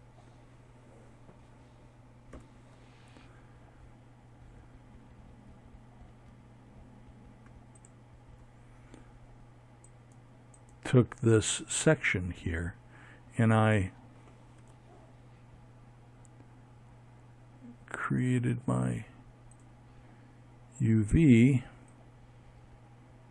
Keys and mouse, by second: 0.0 F11, 5.4-7.6 drag, 12.2 Tab, 17.2 click, 19.5-21.2 drag.